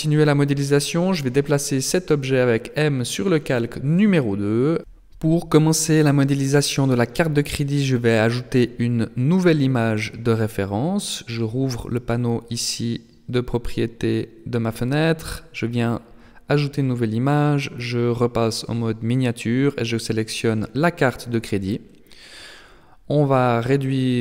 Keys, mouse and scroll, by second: 6.1 n, 7.3-9.3 scroll down 7, 11.6 click, 12.4 click, 14.9 click, 22.3 click, 23.8-24.2 scroll down 4.